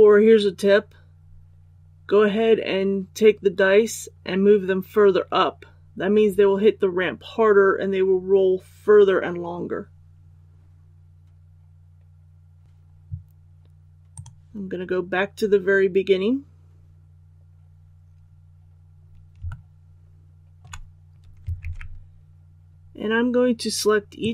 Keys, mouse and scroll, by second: 18.1-18.7 scroll up 1, 19.4-20.5 shift+middle drag, 21.6 alt+a, 24.1 right click.